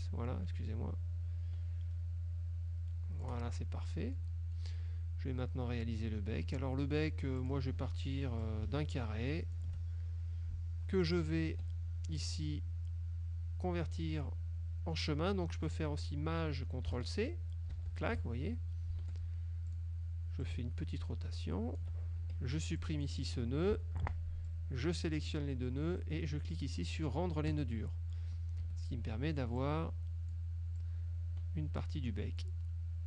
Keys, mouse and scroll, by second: 4.2 click, 7.5 click, 8.5-9.8 ctrl+shift+drag, 11.6 F2, 17.8 ctrl+shift+c, 19.1 F1, 19.8 click, 20.6-22.1 ctrl+drag, 22.3 ctrl+F2, 22.9 ctrl+click, 23.8 Delete, 24.6 click, 27.6 click, 28.7 F1, 29.7 click, 30.9-32.7 drag.